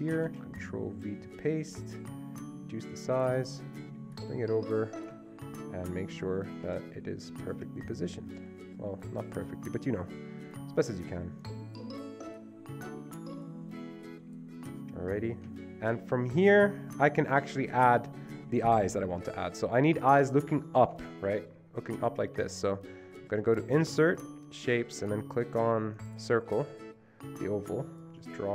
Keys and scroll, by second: 0.9 ctrl+v.